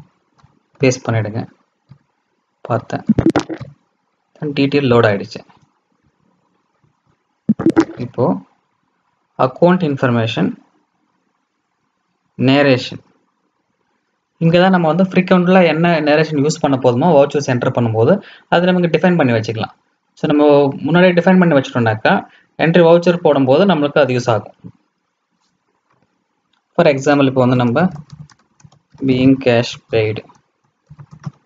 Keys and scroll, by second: 0.3 ctrl+alt+v.